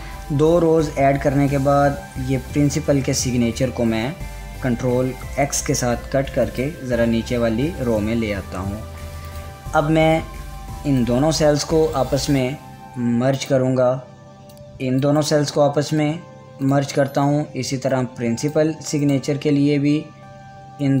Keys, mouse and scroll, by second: 3.3 click, 4.5 ctrl+Tab, 5.5 x, 7.0 click, 8.7 ctrl+v, 9.9-12.4 drag, 12.4 right click, 15.8 right click, 17.2 click, 19.6 right click.